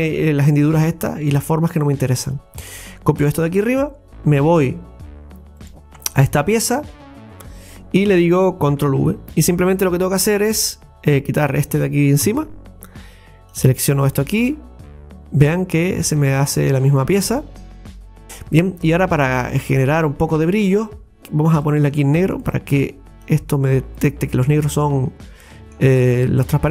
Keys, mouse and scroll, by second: 5.6 right click, 8.9 ctrl+v, 11.1 scroll up 10, 11.6 click, 12.2 Delete, 13.6 click, 15.7 scroll up 2, 16.0 scroll down 1, 16.2 middle click, 17.1 scroll up 2, 17.3 shift+middle click, 17.9-18.2 scroll up 2, 19.9 click, 24.2 click, 25.6-26.7 middle drag.